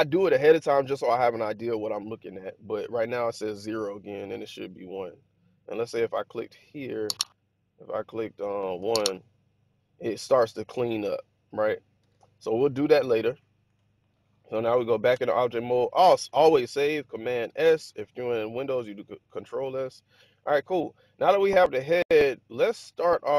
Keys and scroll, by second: 8.7 1, 8.9 Return, 11.9 super+z, 13.6 Tab, 15.1 1, 17.2 super+s.